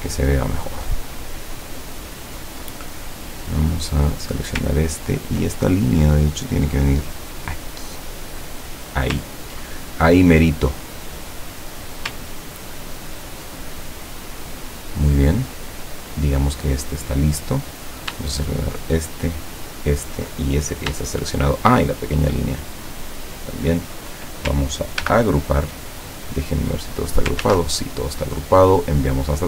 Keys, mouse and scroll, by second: 0.2-0.7 ctrl+scroll down 4, 3.2-3.6 scroll up 2, 4.2 click, 4.8-5.3 ctrl+scroll up 4, 6.5-9.2 drag, 10.0 ctrl+click, 11.1 click, 12.3-13.1 ctrl+scroll down 4, 13.8-14.4 ctrl+scroll up 3, 14.5 scroll down 2, 17.7 click, 18.5 shift+click, 19.6 shift+click, 21.7 shift+click, 22.9 shift+click, 25.1 ctrl+g, 26.6 click, 27.5 ctrl+z, 29.0 click.